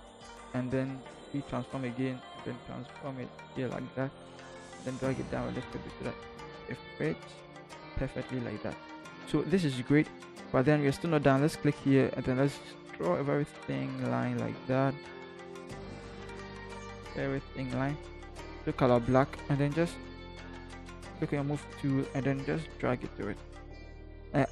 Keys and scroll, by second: 4.6 Down, 4.8 Down, 5.3 Down, 6.3 Return, 20.4 Left, 20.6 Left, 20.9 v, 21.1 Left, 21.3 Left, 21.5 Left, 21.6 Left, 21.8 Left, 22.0 Left, 22.2 Left, 24.0 Up, 24.2 Up, 24.3 Up.